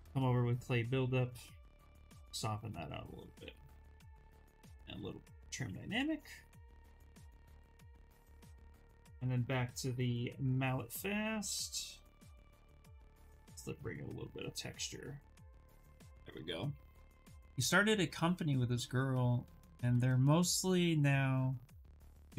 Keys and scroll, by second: 3.6-5.1 typing.